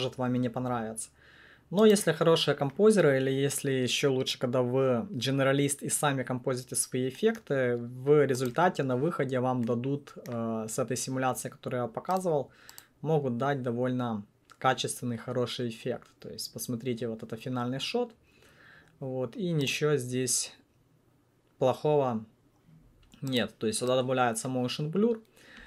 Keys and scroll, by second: 8.5 1.